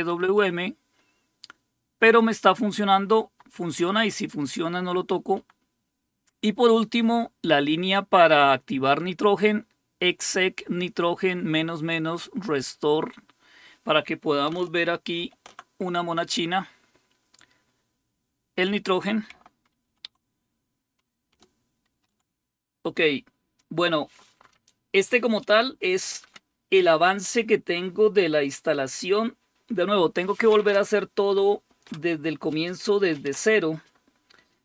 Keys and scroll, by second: 0.0 Right, 0.2 Right, 0.5 Right, 0.7 Right, 3.1 Down, 3.4 Down, 3.8 Down, 4.1 Down, 5.4 Down, 15.3 super+5, 20.0 super+1, 21.9 ctrl+x.